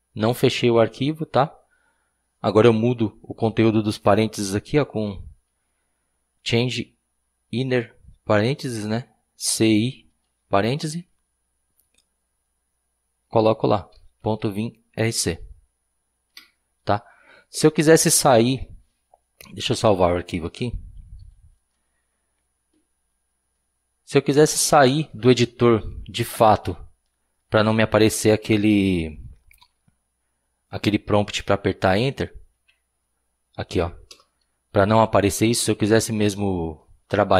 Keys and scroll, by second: 9.8-10.8 typing, 13.7-15.6 typing, 16.3 Escape, 20.4-21.2 typing, 21.8 Return, 29.5 :, 32.1 !, 32.6 Up, 34.1 Return.